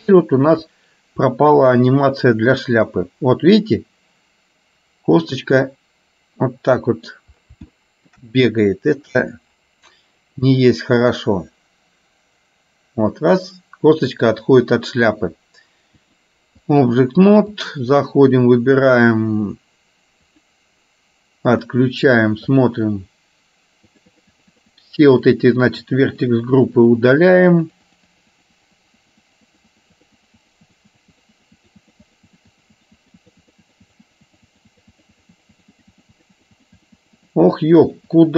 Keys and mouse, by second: 0.2 shift+middle click, 1.7-7.4 drag, 7.9 shift+middle click, 11.2-15.4 drag, 16.2 click, 17.6 click, 20.4 click, 22.6 click, 24.1-25.1 drag, 25.2 click, 25.7 click, 26.7-28.1 drag, 28.2-29.5 drag, 29.6 click, 30.4 click, 31.0 click, 31.7 click, 32.5 click, 33.6 click, 34.4-36.7 drag, 36.9-37.9 drag, 38.1 click.